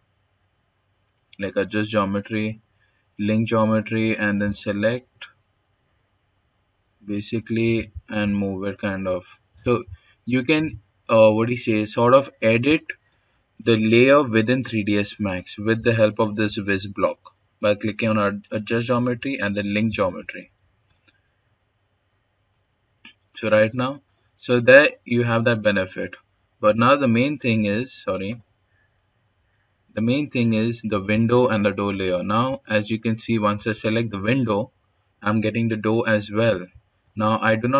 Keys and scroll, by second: 6.9 w, 19.2 ctrl+z, 25.4-26.2 x, 26.1 x, 26.4 x.